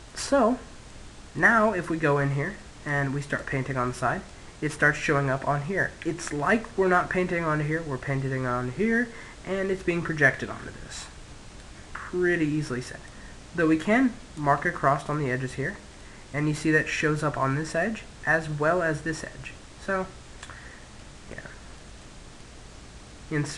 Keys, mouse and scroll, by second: 2.4 click, 3.9-6.0 middle drag, 11.3-12.4 middle drag, 12.4 click, 14.0-18.5 middle drag, 19.7-23.5 middle drag.